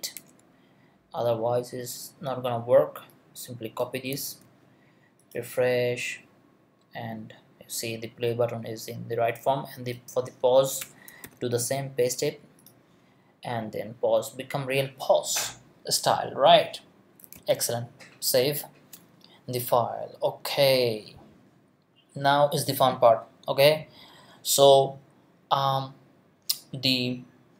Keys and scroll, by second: 10.8 Return, 11.2 super+v, 17.3 super+s.